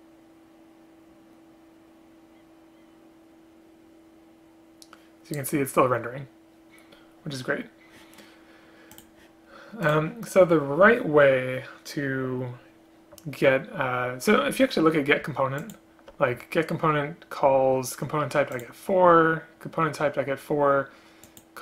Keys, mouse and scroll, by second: 15.7 ctrl+click, 18.6 ctrl+click.